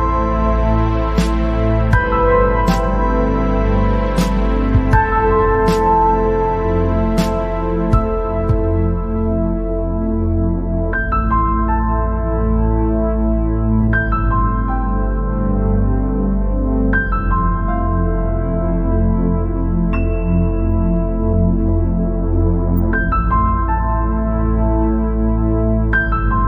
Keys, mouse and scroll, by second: 2.3 alt+e, 5.4 scroll down 3, 5.9-6.2 scroll up 3, 6.2 scroll down 1, 6.5-7.5 middle drag, 7.5 scroll up 1, 8.8 e, 10.2 scroll up 2, 10.4 scroll down 3, 10.6-11.8 middle drag, 11.8 scroll up 2, 12.1 scroll down 1, 12.3 middle click, 13.2-13.9 scroll up 2, 13.9 scroll down 1, 14.1 middle click, 15.0-16.8 drag, 17.8-19.9 drag, 20.3 scroll down 1, 20.4 middle click, 21.1 scroll up 3, 21.7 scroll down 2, 22.2 scroll up 2, 22.5 scroll down 1, 22.6-23.7 middle drag, 23.7 scroll up 1, 24.7 e.